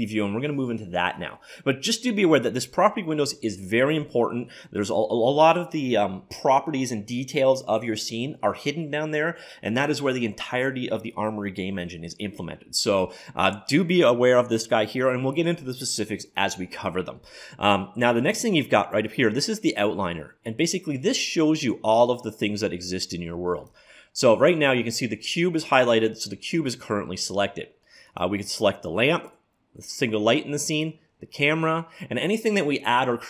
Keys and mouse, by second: 0.0 click, 22.9-24.7 drag, 28.1-29.9 drag, 30.8-32.6 drag.